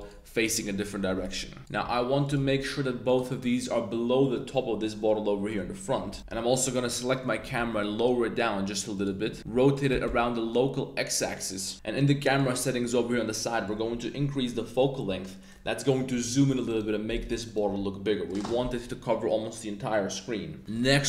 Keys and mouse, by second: 0.0 click, 1.0-2.4 typing, 2.2 click, 3.0 click, 6.1 shift+click, 6.2 z, 7.3 g, 7.6 z, 8.9 click, 9.4 r, 9.9 x, 10.0 x, 11.1 click, 12.3 click, 13.7-15.5 drag, 16.7 right click, 17.2 right click, 17.4 right click, 17.7 g.